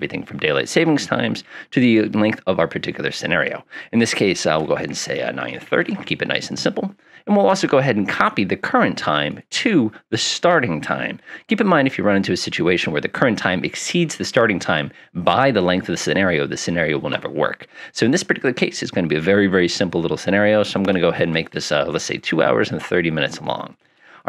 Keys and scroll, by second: 4.9-6.4 typing, 21.2 typing, 22.5-24.2 typing.